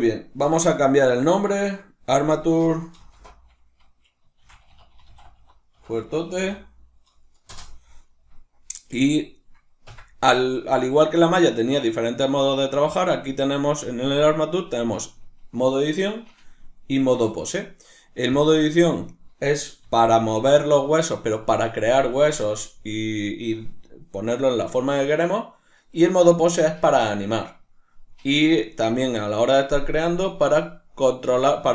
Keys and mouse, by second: 0.4 F2, 9.9 Tab, 19.0 right click, 19.8 g, 20.7 right click.